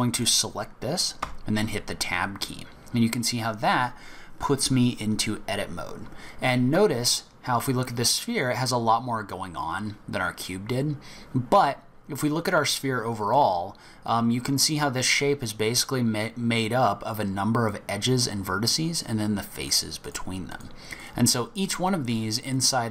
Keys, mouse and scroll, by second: 0.1 click, 1.2 Tab, 7.9-9.0 scroll up 4, 9.0-11.4 scroll down 1, 13.1 click, 19.6 click, 20.0 click, 20.4 click, 20.9 click, 21.6 click, 22.1 click, 22.4 click.